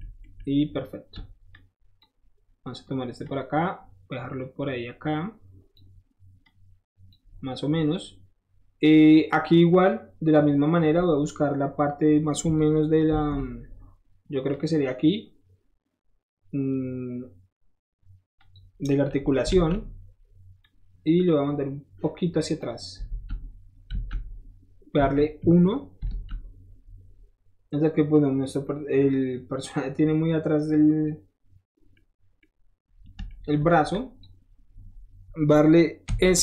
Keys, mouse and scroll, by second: 0.4 shift+middle click, 0.8 shift+middle click, 1.5 shift+click, 2.2 shift+middle click, 3.2-5.7 shift+drag, 6.4 click, 7.3 scroll down 1, 9.1 middle click, 9.2 middle click, 13.1 ctrl+r, 14.5 click, 18.4 click, 18.9 middle click, 19.5 alt+z, 19.8 scroll up 1, 20.6-22.6 drag, 23.1 alt+z, 23.9 alt+z, 24.9 KP_1, 25.4 KP_3, 26.1 z, 27.0 alt+middle click, 28.5 alt+middle click, 28.9-29.5 scroll up 1, 29.5-30.0 scroll down 1, 30.0-30.7 scroll up 1, 30.7-31.9 scroll up 1, 31.9 click, 32.4-33.5 middle drag, 33.9 shift+click, 34.5-35.8 shift+middle drag, 36.1 s.